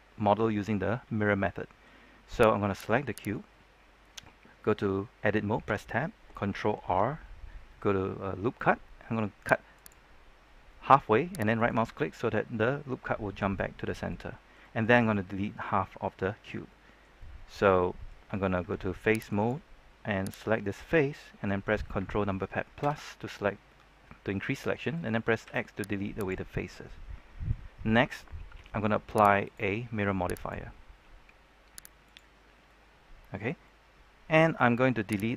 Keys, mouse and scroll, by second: 2.2-2.7 scroll up 1, 2.7 right click, 5.6 Tab, 6.8 ctrl+r, 9.7 click, 11.5 right click, 13.5-18.3 middle drag, 19.2 ctrl+Tab, 19.2-20.3 drag, 20.3 right click, 20.5 middle click, 23.6-25.4 middle drag, 25.4 x, 26.1 click, 26.5 middle click, 29.4 click, 32.6 middle click, 35.1 right click.